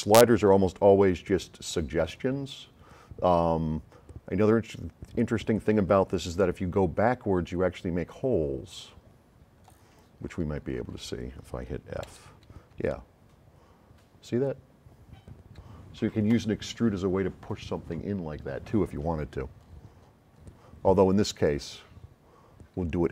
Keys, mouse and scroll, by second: 0.3 click, 10.7 scroll up 2, 12.2 f, 12.8 s, 12.9-16.3 right drag, 19.9 middle click, 20.3 middle click, 21.5 click.